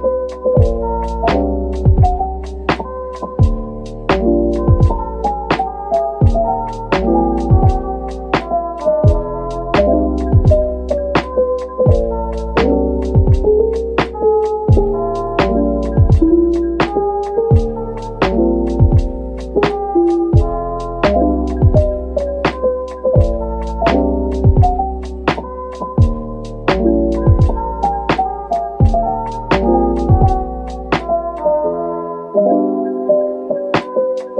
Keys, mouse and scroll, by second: 4.6 double click, 5.3-6.7 typing, 7.8 double click, 8.3-9.6 typing, 11.0 ctrl+l, 13.0 scroll up 1, 15.8-17.0 scroll down 1, 20.1 middle click, 22.2 scroll up 1, 23.2 middle click, 25.1 middle click, 27.6 shift+click.